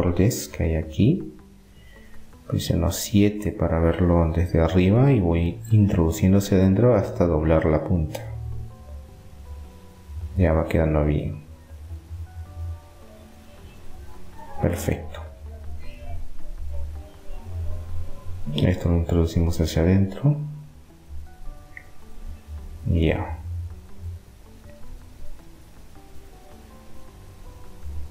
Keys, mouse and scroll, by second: 2.8 KP_7, 3.1 middle click, 5.8 g, 10.5 middle click, 14.6 click, 16.5-19.4 right drag, 19.4-21.1 drag, 23.1-25.5 middle drag, 27.9 ctrl+r.